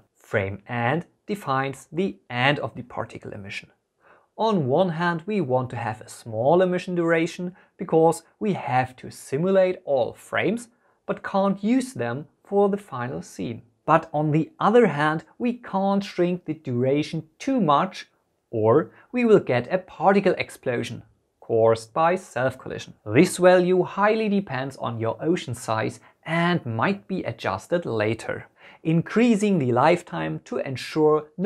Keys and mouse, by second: 4.1-9.8 drag, 13.8 space, 14.5 space, 29.2-31.4 drag, 31.1 KP_0.